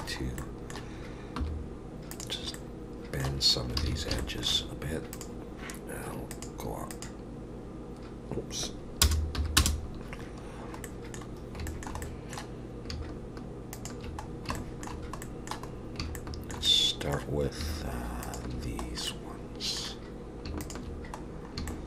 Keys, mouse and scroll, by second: 0.1-0.4 scroll up 1, 0.4 middle click, 1.4 2, 2.1 click, 2.5 middle click, 3.5 scroll up 4, 3.8 alt+a, 4.2 shift+middle click, 5.1 click, 6.3 click, 10.9 middle click, 11.3-11.7 scroll down 4, 11.7 shift+middle click, 12.0 middle click, 13.7 shift+click, 14.3 scroll down 2, 14.5 shift+middle click, 15.2 middle click, 15.7 scroll up 2, 16.2 shift+middle click, 16.7 middle click, 18.2 shift+click, 19.1 middle click, 20.6 shift+click, 21.2-21.7 scroll down 4, 21.7 shift+middle click.